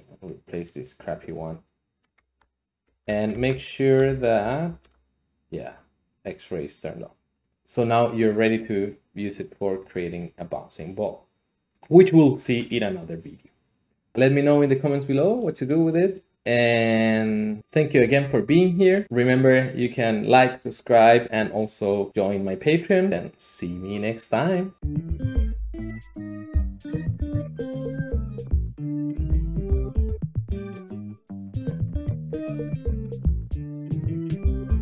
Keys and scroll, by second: 2.2 Tab, 2.9 Tab, 3.3 Tab, 4.1 alt+z, 4.4 alt+z, 4.6 alt+z, 7.5 Escape, 7.5 g, 7.5 z.